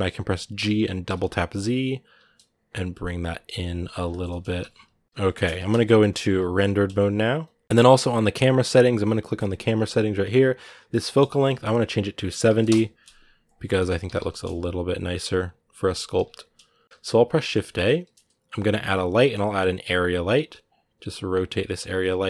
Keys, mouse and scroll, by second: 3.9 shift+middle click, 4.2 g, 9.1-13.6 drag, 13.6 g, 21.3 g.